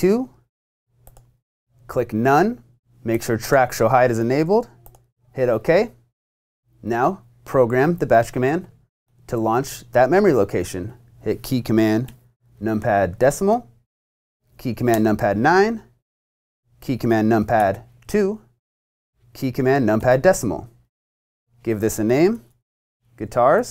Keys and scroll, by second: 0.0-0.2 typing, 15.0 9, 17.6 2, 22.1-23.7 typing.